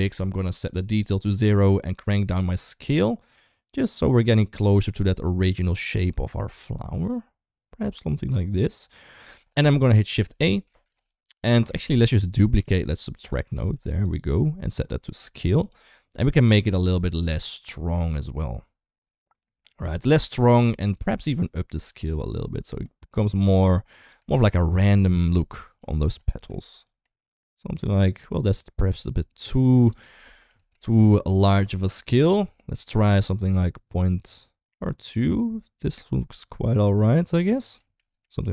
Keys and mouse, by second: 0.1 click, 1.7-9.2 shift+drag, 9.6 middle click, 9.9 middle click, 10.7 shift+a, 11.9 click, 12.3 middle click, 12.8 click, 13.4 shift+d, 14.6-15.6 drag, 16.6-20.6 shift+drag, 20.6 shift+middle click, 21.3-23.9 drag, 24.3 shift+middle click, 24.7 shift+middle click, 25.0 shift+middle click, 26.2 shift+middle click, 26.6-29.8 shift+drag, 30.1 shift+middle click, 30.7 shift+middle click, 31.3-37.5 shift+drag, 37.8 middle click.